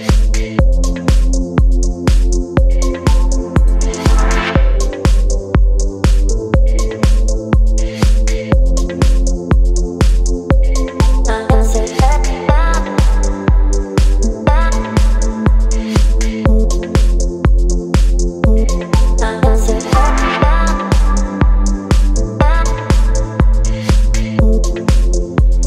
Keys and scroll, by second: 0.0 Return, 2.4 ctrl+t, 4.5 Return, 7.4 ctrl+j, 8.1 ctrl+t, 14.5 Return, 17.4 space, 21.8 space, 25.0 space.